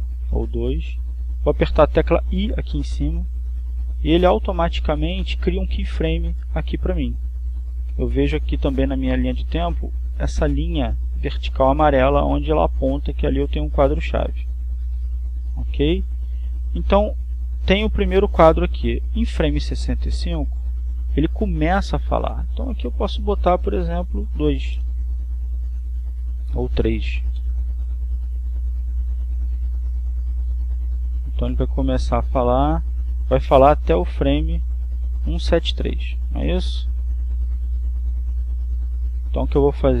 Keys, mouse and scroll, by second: 4.5 i, 10.3-11.6 drag, 11.8 click, 14.5-18.2 drag, 21.2-22.8 drag, 24.2 click, 25.8 2, 26.3 Return, 27.7 click, 28.6 3, 28.9 Return, 30.7-37.7 drag, 38.6-40.0 drag.